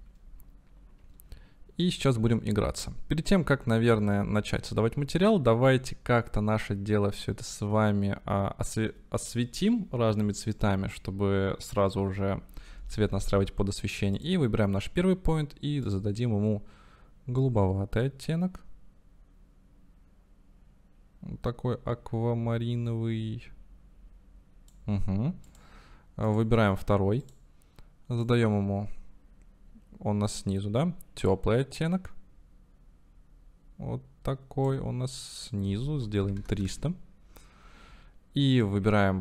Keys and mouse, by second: 16.0-27.4 drag, 35.5-37.9 drag, 36.6 KP_0.